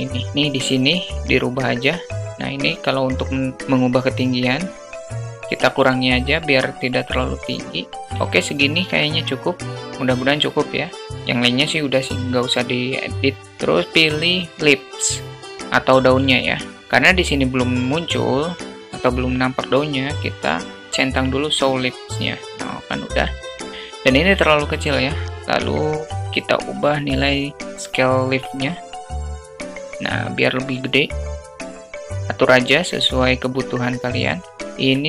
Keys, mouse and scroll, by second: 0.5-7.6 drag, 7.9 shift+middle click, 8.8 alt+middle click, 13.1-15.3 drag, 21.9 click, 28.6-34.1 drag, 34.5-35.0 alt+middle drag.